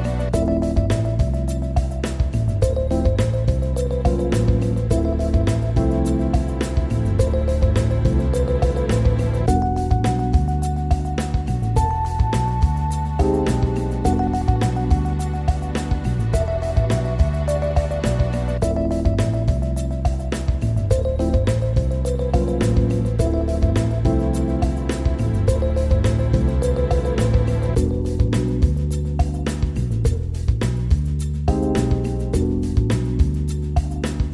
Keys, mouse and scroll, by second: 0.4 shift+space, 4.1 shift+space, 4.8-5.1 scroll up 2, 5.1 scroll down 2, 5.4-6.7 shift+middle drag, 6.9 click, 7.4 click, 8.9 click, 9.2 click, 11.3-14.3 drag, 18.3 click, 19.2-19.7 scroll up 2, 19.7-21.4 shift+middle drag, 21.4 scroll up 5, 21.8 shift+middle click, 22.3-23.5 scroll down 6, 23.5-24.6 drag, 24.6-25.4 scroll down 3, 25.4 shift+space, 28.6-29.2 scroll up 3, 30.4 shift+space, 30.9-32.3 drag, 32.3-32.8 scroll down 2, 32.8 shift+space.